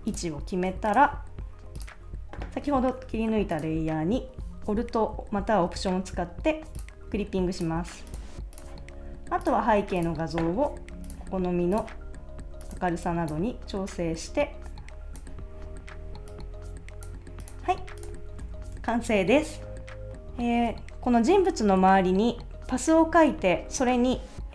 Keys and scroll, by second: 18.5 super+s.